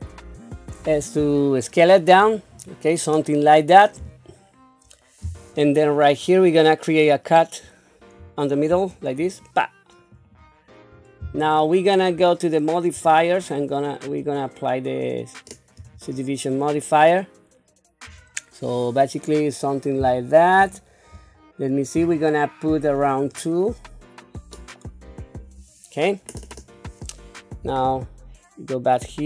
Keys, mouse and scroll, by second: 8.2 ctrl+r, 12.9 click, 14.1-15.9 drag, 23.1 click, 27.8 q.